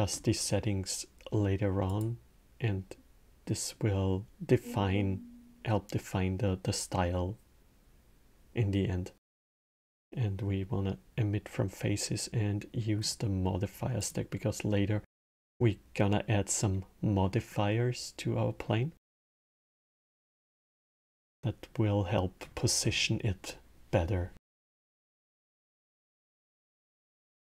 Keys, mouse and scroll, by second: 1.6-8.0 drag, 13.7 click, 20.7-23.9 drag.